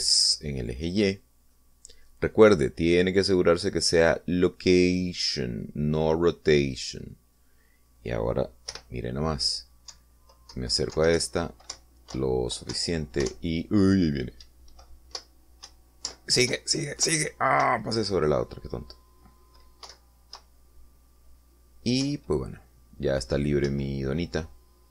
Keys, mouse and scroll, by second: 0.0 Right, 0.6 3, 1.1 Return, 2.8 click, 6.0-8.2 drag, 10.0 p, 11.2 Down, 11.8 Left, 12.4 Right, 13.0 Up, 13.4 Left, 14.0 Down, 14.6 Up, 15.7 Right, 17.4 Up, 17.8 Left, 18.9 Right, 21.2 Left, 21.6 Right, 23.3 Up.